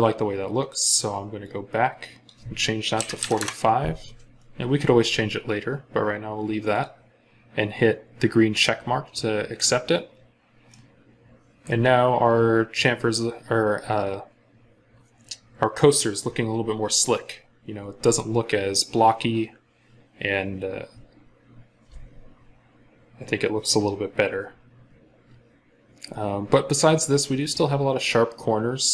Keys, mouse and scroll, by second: 1.3 double click, 2.8-3.2 typing, 3.2 Return, 8.5-9.2 scroll up 1, 9.9 scroll down 1, 10.4 scroll up 1, 10.5 middle click, 26.5 scroll up 1, 27.0 scroll down 1.